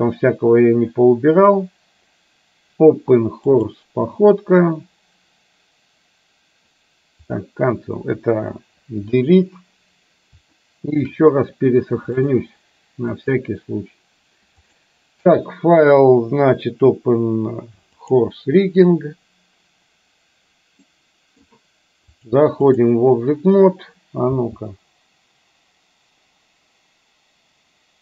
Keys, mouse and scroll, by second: 9.2 Delete, 10.7-11.0 middle drag, 12.3-13.5 drag, 14.9-19.2 drag, 21.0 middle click, 22.3 click, 24.5 space.